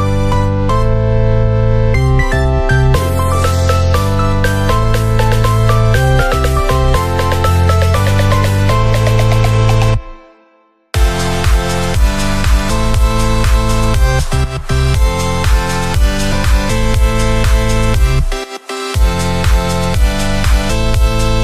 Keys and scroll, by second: 2.0 BackSpace, 2.0 0, 10.7 ctrl+=, 19.7 7, 20.6 0.